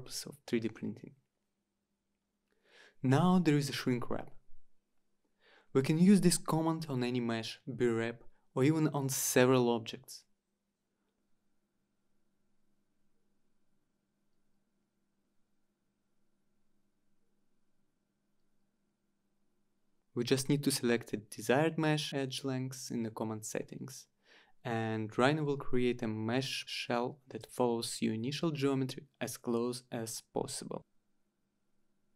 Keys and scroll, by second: 11.7-13.7 typing, 15.2-16.0 typing, 17.1 typing, 17.7 Return, 21.9 Return.